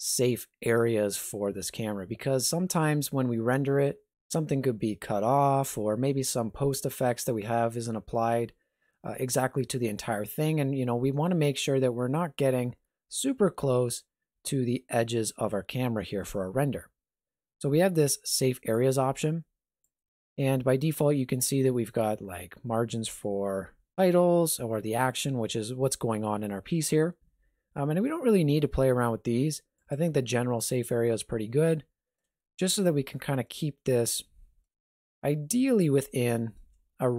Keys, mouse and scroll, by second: 18.7 click, 19.9 click, 29.8 click, 31.6 ctrl+middle click, 32.4 shift+middle click, 34.0 ctrl+middle click, 34.8 shift+middle click.